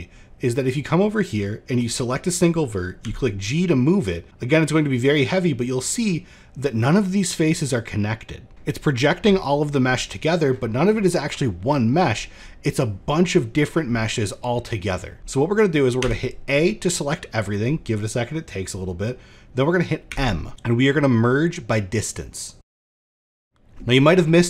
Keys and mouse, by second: 2.6 g, 8.5 middle click, 10.8 middle click, 11.3 middle click, 11.6 shift+middle click, 13.5 middle click, 14.3 middle click, 14.8 shift+middle click, 16.4 a, 19.6 m.